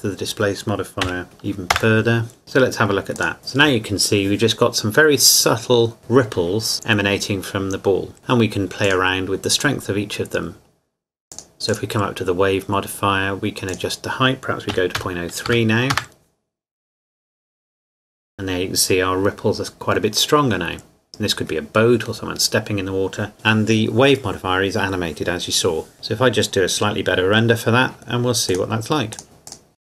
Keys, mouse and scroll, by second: 1.0 KP_Decimal, 1.2 KP_5, 1.8 KP_Enter, 2.4 click, 8.2 click, 11.3 click, 14.7 KP_Decimal, 15.0 KP_0, 15.5 KP_3, 15.9 KP_Enter, 25.9 shift+middle click, 28.5 click, 29.7 scroll up 1, 29.8 click.